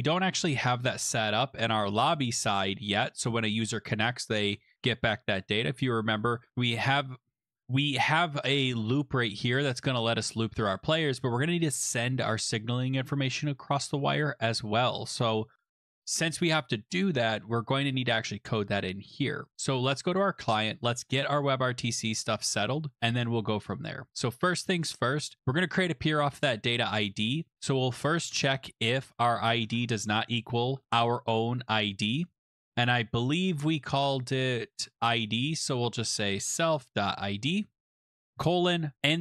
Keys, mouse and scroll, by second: 1.3 click, 2.3 click, 6.0-6.9 scroll, 10.8 click, 19.2 click, 21.0 click, 22.9-23.4 scroll, 24.0-24.5 scroll, 24.5 click, 26.2 click, 26.8 click, 28.0-32.9 typing, 33.5-34.0 scroll, 34.8-35.3 scroll, 35.3 middle click, 35.3-38.8 typing, 35.6 middle click, 35.6 middle click, 35.7 middle click, 37.8-38.3 scroll.